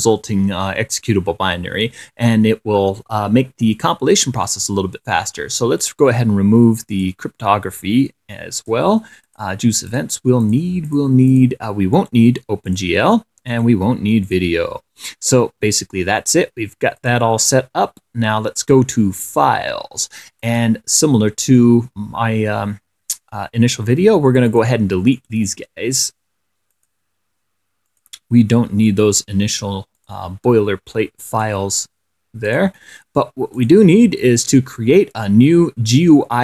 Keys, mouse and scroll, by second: 6.1 right click, 7.2 click, 8.8 click, 9.6 click, 10.2 click, 10.7 click, 11.2 click, 11.6 click, 12.2 right click, 12.9 click, 13.8 right click, 14.5 click, 17.3 click, 18.9 click, 20.7 click, 24.8 click, 25.4 right click, 27.0 click, 27.4 middle click, 28.2 click, 28.5 middle click, 29.2 right click, 30.2-30.6 scroll up 1, 31.6 click, 32.8 click, 33.8 click, 34.7 right click.